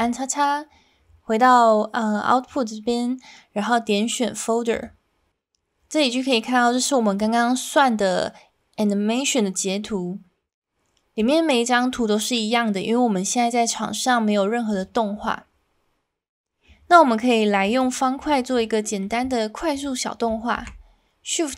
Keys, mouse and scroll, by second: 4.7 click, 17.6 click, 18.8 middle click, 19.7 click, 20.6 shift+a.